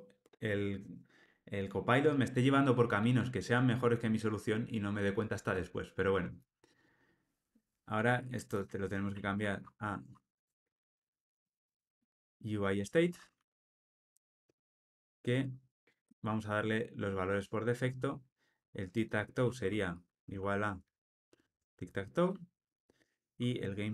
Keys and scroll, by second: 14.4 Return, 21.4 Tab.